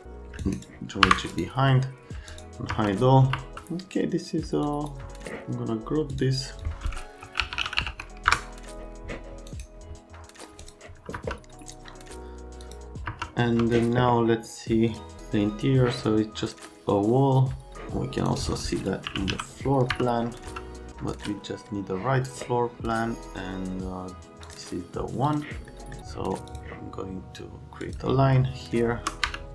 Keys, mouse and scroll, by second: 0.4 scroll up 1, 1.0 Delete, 1.3 right click, 2.3 click, 2.7 F3, 3.2 F3, 4.6 click, 6.1 click, 6.5 click, 6.9-8.4 typing, 9.5 right click, 10.6 click, 11.1 F3, 12.6 right click, 13.0 F3, 13.5 F3, 14.9 click, 18.2 right click, 18.8-19.8 typing, 18.8 click, 19.9 F3, 20.9 alt+middle click, 29.2 F3.